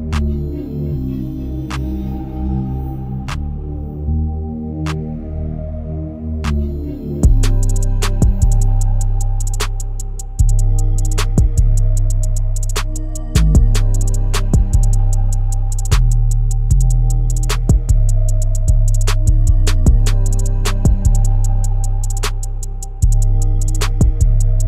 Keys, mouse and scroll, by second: 5.9-6.5 scroll down 7, 6.5 click, 7.1-8.2 drag, 8.2-8.7 scroll down 4, 8.7-12.0 shift+middle drag, 12.0-12.5 scroll up 1, 12.5 click, 13.0 shift+middle click, 13.8 s, 15.5 click, 16.2 s, 19.3 scroll up 2, 20.5 g, 22.5 scroll down 2, 23.1-24.5 shift+middle drag, 24.5 g.